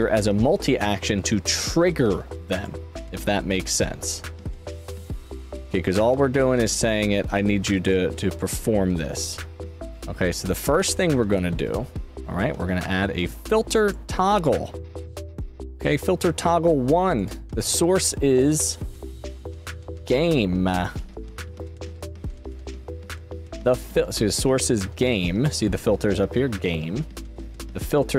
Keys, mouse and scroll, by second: 2.5 click, 4.5 click, 6.8-7.8 drag, 17.1 click, 21.9 click.